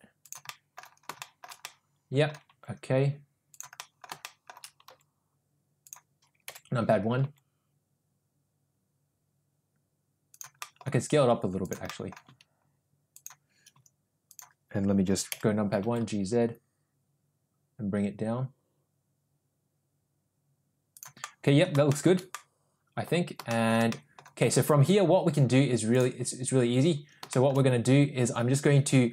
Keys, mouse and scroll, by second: 0.6 middle click, 1.3 middle drag, 1.7-2.3 middle drag, 2.5 g, 3.8 middle click, 4.3 middle click, 4.9 g, 6.5 KP_1, 7.2 g, 10.7 middle click, 10.9 s, 12.0 middle click, 12.3 s, 13.8 s, 15.3 KP_1, 15.8 g, 21.3-21.6 middle drag, 22.0 shift+middle drag, 22.3-23.1 middle drag, 23.6 shift+middle drag, 24.0-24.3 middle drag, 25.9-26.4 drag, 27.3 shift+middle drag.